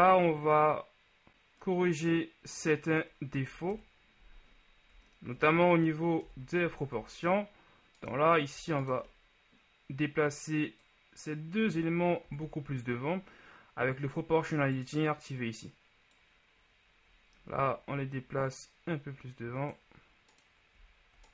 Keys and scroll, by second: 0.2 Tab, 4.0 KP_3, 6.4 KP_1, 7.1 Tab, 12.4 ctrl+z.